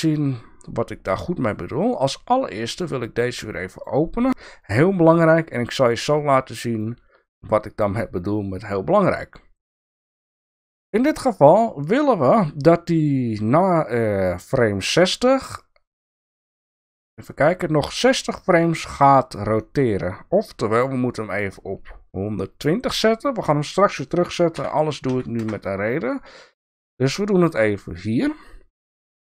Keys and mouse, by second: 2.0 click, 3.3 click, 4.6-5.6 drag, 6.4 click, 15.6-19.6 drag, 22.6-24.3 drag, 26.3 click.